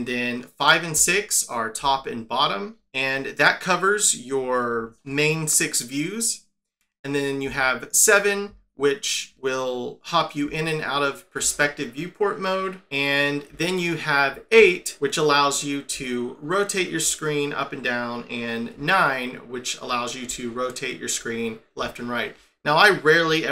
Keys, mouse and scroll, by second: 0.9 5, 1.8 6, 7.4 7, 8.4 7, 11.4 7, 13.4-14.2 8, 14.5-16.9 8, 18.7-19.8 9, 20.2-21.1 9, 22.3 9.